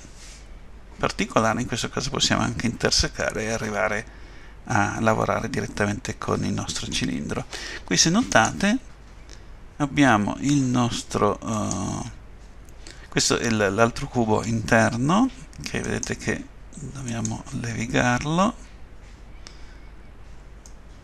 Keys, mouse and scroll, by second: 8.3 click, 11.5 click, 15.8 right click, 20.7 middle click.